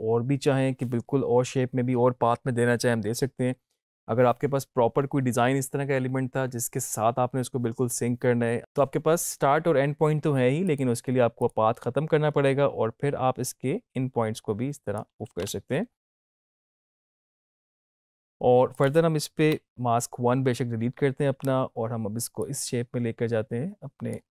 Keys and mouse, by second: 0.0 click, 8.0 click, 10.6-15.3 drag, 15.3 ctrl+z, 17.4 click, 19.4 click, 22.3-24.3 drag.